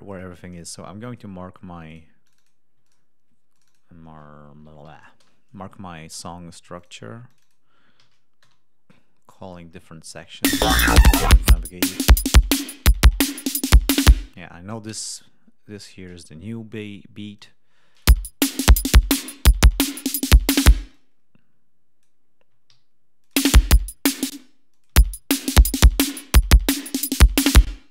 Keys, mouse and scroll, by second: 1.8 click, 2.1 click, 2.7 ctrl+click, 3.4 ctrl+click, 4.7 shift+b, 5.1 shift+Return, 6.7 ctrl+click, 7.2 ctrl+click, 7.9 shift+a, 8.3 shift+Return, 9.2 click, 10.0 click, 10.2 space, 10.5 ctrl+scroll up 2, 12.0-12.5 scroll down 4, 13.1-13.5 scroll down 5, 14.0 ctrl+scroll up 3, 14.2 space, 14.9-16.2 drag, 16.2 scroll down 2, 17.3 ctrl+click, 17.8 click, 17.9 space, 20.7 space, 20.8-22.1 drag, 22.6 alt+d, 23.1 ctrl+alt+click, 23.3 space, 23.4 ctrl+scroll up 2, 24.2 space, 24.6 click, 24.8 space, 26.5 ctrl+scroll down 2, 26.9 ctrl+scroll up 2, 27.5 ctrl+space.